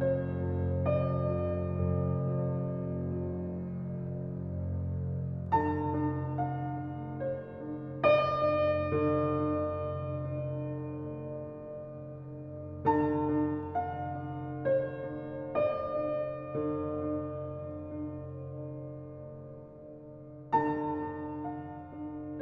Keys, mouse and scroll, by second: 6.9-8.4 alt+right drag, 10.2 alt+click, 12.1-13.1 drag, 13.9-14.9 drag, 17.9-19.5 drag.